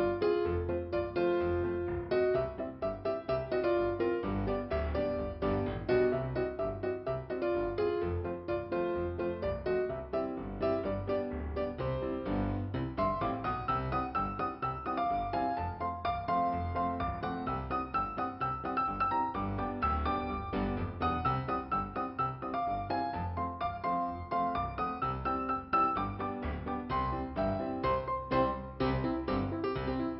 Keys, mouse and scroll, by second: 0.4-0.9 scroll down 1, 3.1 right click, 3.8 right click, 4.4 right click, 5.4 click, 7.2 click, 13.8 click, 14.2 click, 14.5 click, 14.7 click, 17.1 middle click, 19.1 click, 19.3 click, 20.0 right click, 21.0 f, 21.8 right click, 23.1 middle click, 25.6 scroll down 2, 26.7 scroll up 2, 27.7 click, 28.7 click.